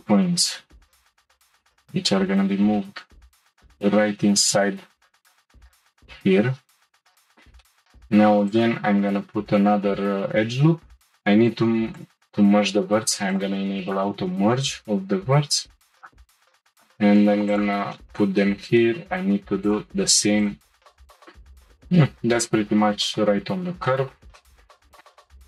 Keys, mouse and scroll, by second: 1.5 g, 7.3 shift+middle click, 7.6 scroll up 1, 8.5 click, 9.2-10.4 scroll up 2, 10.5 ctrl+r, 11.2 scroll up 2, 11.3 1, 12.0 click, 13.3 click, 15.2 g, 16.7 click, 17.0 g, 18.0-19.6 middle drag, 19.6 click, 19.9 g, 21.0-25.0 shift+middle drag.